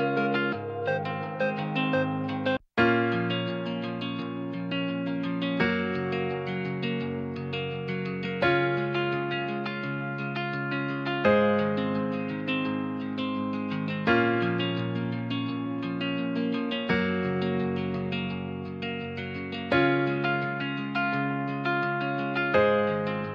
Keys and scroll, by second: 0.7 Left, 1.2 BackSpace, 2.2 Return, 7.2 BackSpace, 9.7 BackSpace.